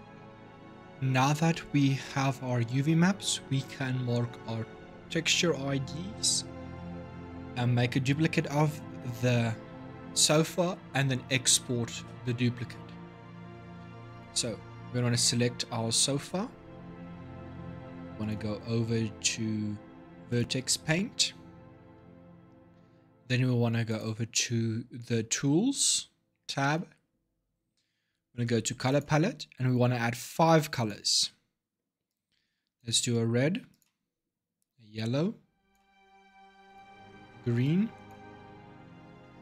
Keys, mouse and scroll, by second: 0.0 ctrl+shift+Up, 13.9 click, 18.0-21.0 drag, 23.7 click, 27.4-28.7 scroll down 5, 28.7-39.4 drag.